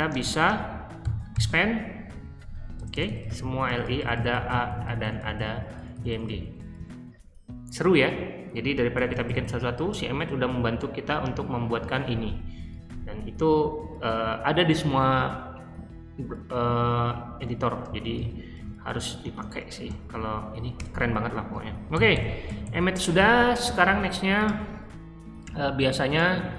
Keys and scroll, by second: 0.0-6.7 typing, 1.0 ctrl+y, 8.7-9.7 typing, 17.6-19.7 typing, 20.7 Return, 21.6-23.1 typing, 26.3 super+c.